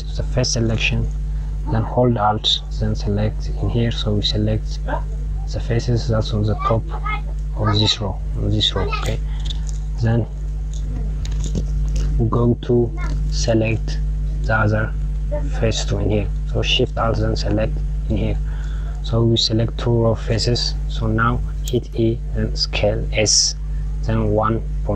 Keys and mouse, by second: 2.5 click, 8.8 KP_Subtract, 16.9 alt+shift+click, 21.3 e.